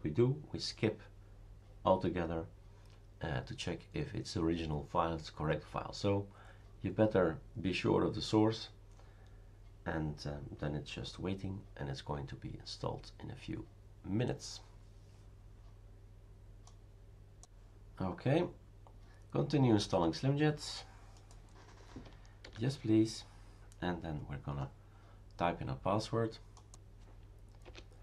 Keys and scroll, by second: 22.4 y, 27.6 Return.